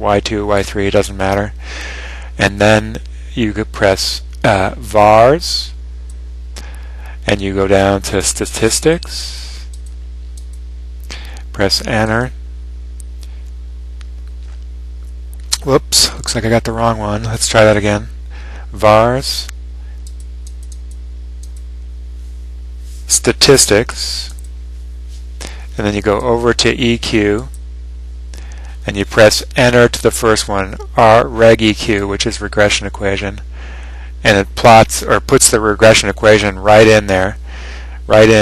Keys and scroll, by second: 8.8 Down, 9.5 Down, 10.1 Down, 10.7 Down, 11.4 Down, 12.1 Return, 20.4 Down, 21.1 Down, 21.7 Down, 22.4 Down, 24.4 Return, 26.4 ), 27.5 ), 32.8 Return.